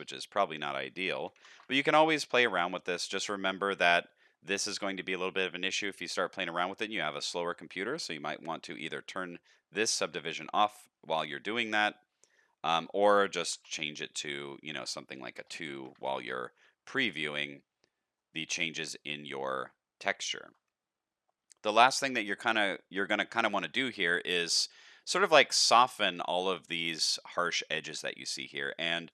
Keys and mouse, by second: 0.3-2.4 drag, 3.2 click, 7.5-9.8 drag, 10.3 click, 11.3 middle click, 12.7-16.2 drag, 18.1 middle click, 19.3 shift+click, 20.1 shift+click, 21.7 shift+click, 22.4 middle click, 24.9-25.5 shift+middle drag, 26.3-27.5 shift+middle drag, 27.9-28.3 shift+middle drag, 29.0 click.